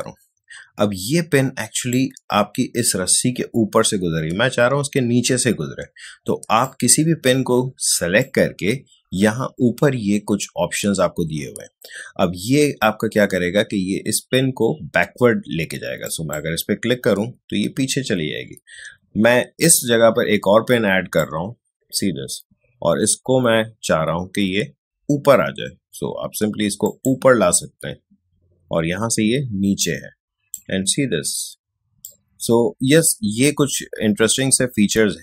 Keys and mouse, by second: 6.6-8.9 drag, 16.0 click, 19.6 click, 21.0 space, 21.2 click, 21.5 space, 26.8 click, 29.8 click, 30.6 space, 32.0-35.2 drag.